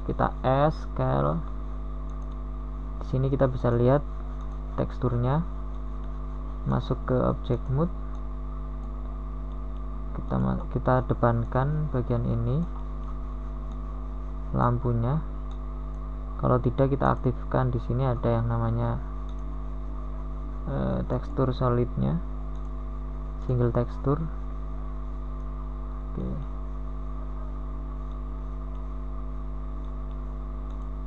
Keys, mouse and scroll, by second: 2.9 s, 7.9 middle click, 29.2 n, 29.5 middle click.